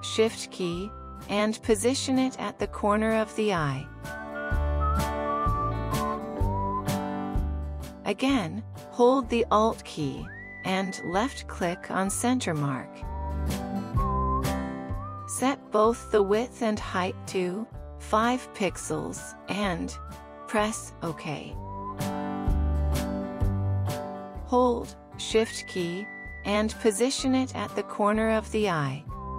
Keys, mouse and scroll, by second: 13.5 alt+click, 16.8 typing, 17.6 Tab, 18.1 typing, 18.9 Tab, 19.7 typing.